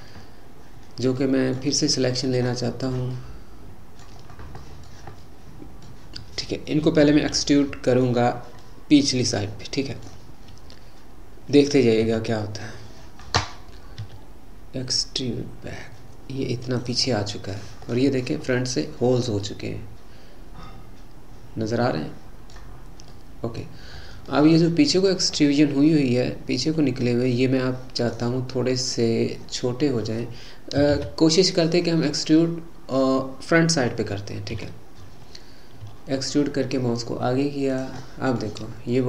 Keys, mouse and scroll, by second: 1.2-2.8 middle drag, 2.8-3.1 scroll down 1, 3.1-9.2 middle drag, 9.2-9.7 scroll down 1, 9.7-12.0 middle drag, 12.0 KP_3, 14.0 e, 17.1-18.5 middle drag, 18.5 scroll up 4, 19.1-19.6 scroll up 2, 19.6-22.7 middle drag, 22.8 scroll up 2, 23.1 middle click, 23.7-24.2 scroll down 7, 24.4-28.5 middle drag, 28.7-29.5 scroll up 2, 29.5-31.0 scroll up 1, 31.0 ctrl+z, 31.8-34.5 middle drag, 34.5 KP_3, 35.9 e, 38.1 middle click, 38.6-39.0 scroll up 3.